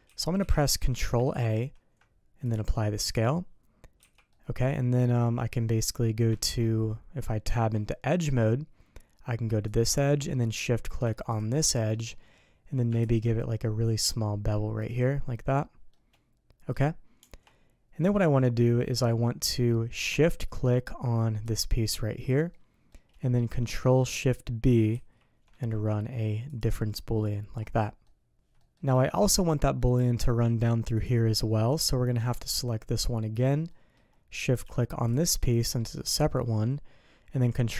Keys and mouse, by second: 0.0 n, 0.4 n, 1.3 ctrl+a, 4.0 n, 4.3 click, 5.7 click, 6.3 shift+click, 7.4 Tab, 8.2 Tab, 9.7 click, 10.3 click, 11.7 click, 13.0 ctrl+b, 15.9 click, 16.0 middle click, 17.2 Tab, 18.0-19.4 middle drag, 21.4 shift+click, 22.5-22.9 drag, 24.9 ctrl+shift+b, 27.2-27.5 drag, 28.0-28.3 drag, 28.5 click, 29.0 shift+middle drag, 29.8 middle drag, 31.0-31.7 drag, 31.7-32.2 middle drag, 33.7 middle drag, 35.1 shift+click, 36.3-36.6 drag.